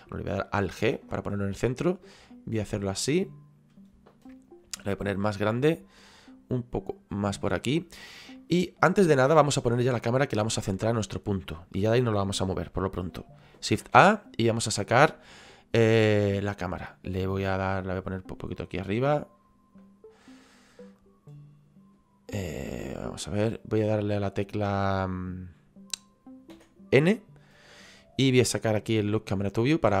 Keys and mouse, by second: 0.8 alt+g, 2.0 click, 5.5 click, 6.9 click, 8.4 middle click, 10.0 middle click, 16.1 click, 18.1 click, 20.5 click, 23.1 click, 24.4 click, 29.3 click.